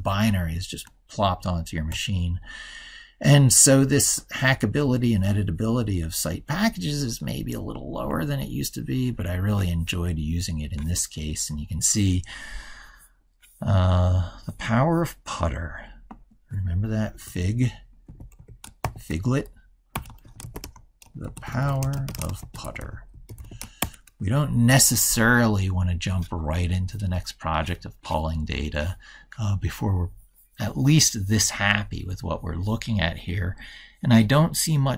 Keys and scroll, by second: 1.9 ctrl+super+Right.